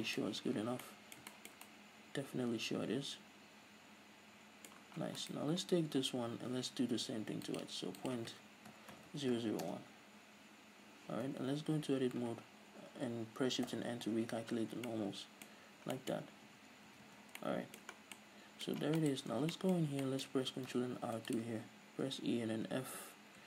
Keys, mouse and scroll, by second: 0.5 scroll up 2, 0.8 z, 5.5 right click, 7.8-14.9 drag, 9.4 KP_8, 10.0 Return, 11.6 Tab, 12.0 a, 14.0 shift+n, 14.9 scroll down 1, 15.2-19.3 middle drag, 16.6-17.2 scroll up 2, 17.2 Tab, 17.3 a, 17.4 scroll down 1, 18.2 scroll down 2, 19.0-19.6 scroll up 4, 19.3 right drag, 19.6 Tab, 19.8-21.3 middle drag, 20.1 scroll up 2, 20.6-21.0 scroll down 2, 21.3 ctrl+r.